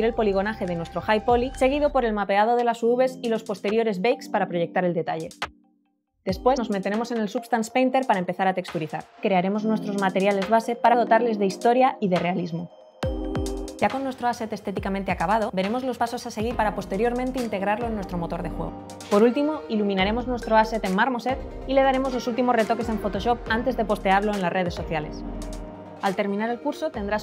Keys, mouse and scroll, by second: 0.0 alt+middle click, 0.1 alt+middle click, 0.3 click, 0.3 middle click, 0.5 click, 0.7 space, 1.1 middle click, 1.7 space.